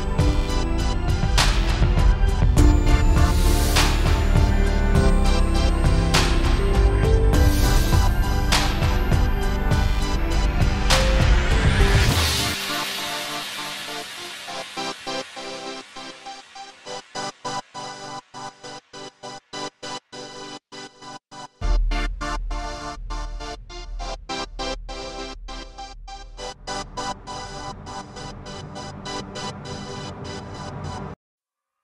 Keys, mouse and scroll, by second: 0.0 shift+middle click, 0.4 click, 0.7 n, 1.3 shift+middle click, 1.5 alt+a, 1.6-2.0 scroll up 1, 2.5 ctrl+space, 2.6 scroll down 6, 2.8 shift+middle click, 8.2 shift+right click, 11.8 scroll down 2, 12.0 alt+a, 13.0 click, 14.0 click, 15.2 alt+a, 15.8 click, 18.5 alt+a, 18.7 z, 19.0 shift+middle click, 19.0-19.4 scroll down 2, 19.4 scroll up 2, 28.7 click, 30.6 r, 31.0 middle click, 31.2 scroll up 2, 31.6 click.